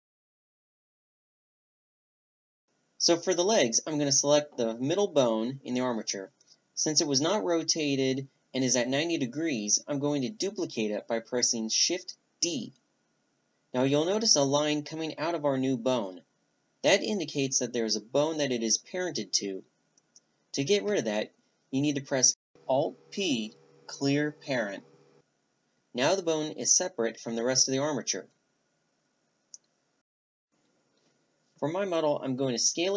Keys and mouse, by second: 0.2-0.7 middle drag, 1.3 middle click, 4.2 a, 10.1-12.4 drag, 12.4 shift+d, 19.2 alt+p, 21.2 alt+p, 25.3 r, 26.6 r, 31.5-32.9 middle drag.